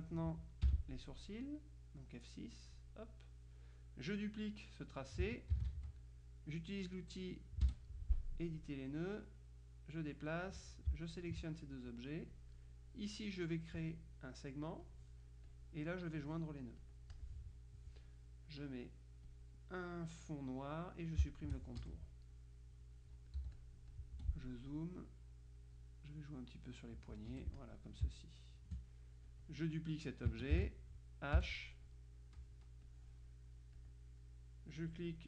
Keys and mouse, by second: 0.7 F6, 2.5 click, 5.6 ctrl+d, 7.7 F2, 9.0-10.8 drag, 11.1 shift+click, 12.4 click, 14.9 click, 16.9 click, 19.4 click, 21.4 shift+click, 21.9 shift+F1, 22.4-24.6 shift+drag, 23.5 z, 24.2 F2, 24.8 click, 25.8-28.2 drag, 27.4 F1, 28.1 space, 29.4 click, 30.6 ctrl+d, 31.4 h, 32.0-33.0 drag, 33.8 click, 35.0 click.